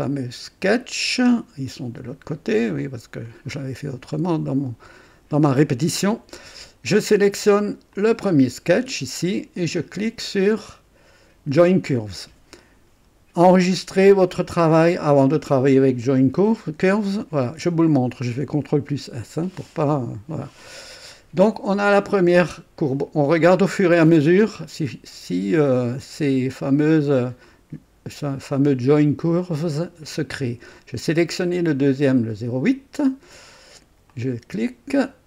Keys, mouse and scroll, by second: 2.8 click, 3.5 scroll up 2, 4.2-5.5 drag, 5.6 scroll up 2, 6.0 right click, 7.9 click, 11.6 click, 17.5 s, 19.5 right click, 20.7-21.2 scroll down 1, 27.4 click, 34.1 click.